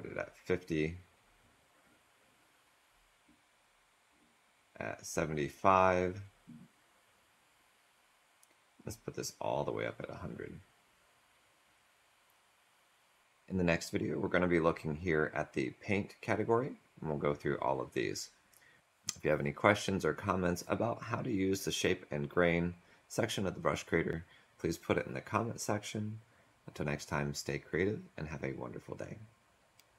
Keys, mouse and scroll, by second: 12.0 click.